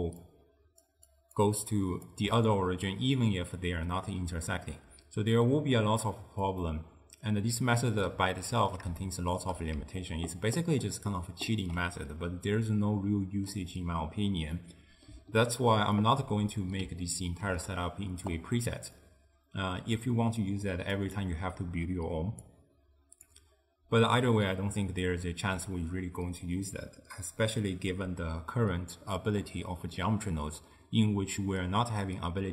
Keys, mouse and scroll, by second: 0.0-2.2 typing, 0.3 click, 1.2 click, 1.8 click, 3.8 d, 5.4-9.8 middle drag, 9.8 d, 10.1-11.7 right drag, 11.7 d, 11.8 d, 12.2-18.4 middle drag, 18.4 click, 21.1 click, 22.6 click.